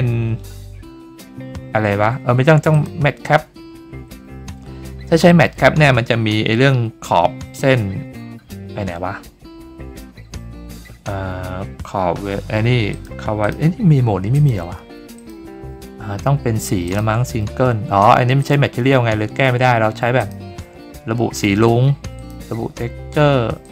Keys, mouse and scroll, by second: 2.7 click, 12.9 click, 13.4 click, 14.3 click, 15.1 click, 16.8 click, 18.4 click, 20.2 click, 22.1 click, 23.6 click.